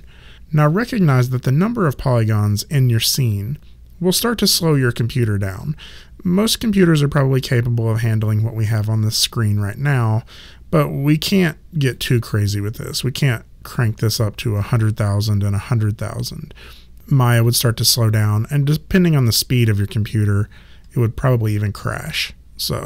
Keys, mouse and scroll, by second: 12.0 click.